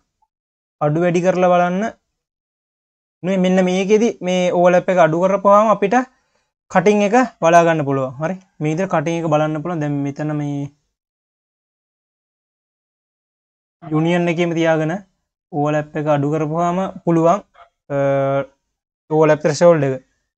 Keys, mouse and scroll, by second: 2.3 q, 4.4-5.1 scroll up 2, 5.1 click, 5.6 q, 8.8 scroll up 2, 9.0 q, 9.8 q, 10.9 click, 12.4 click, 14.4-17.5 drag, 17.7-18.5 scroll down 1, 19.2-19.5 scroll down 3, 19.5 q.